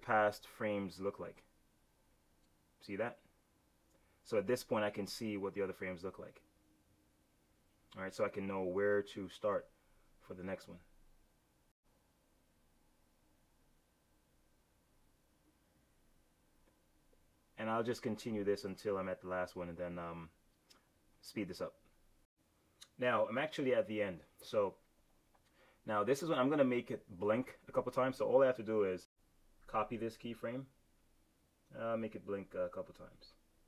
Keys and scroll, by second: 29.5 F6.